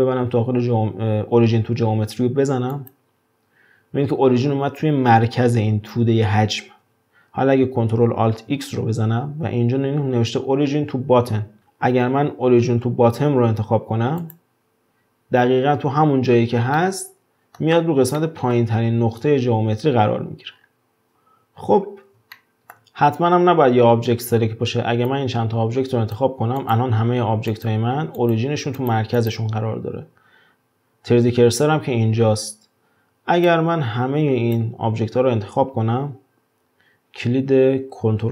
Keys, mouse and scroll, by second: 8.3 ctrl+alt+x, 16.7-20.5 middle drag, 20.5-21.1 scroll down 5, 21.1-22.4 scroll up 1, 22.4-23.1 shift+middle drag, 23.1-24.1 scroll up 2, 24.1-25.1 scroll down 1, 25.1 drag, 26.6 click, 27.5 click, 28.2 click, 28.8 drag, 29.2 click, 33.5 drag.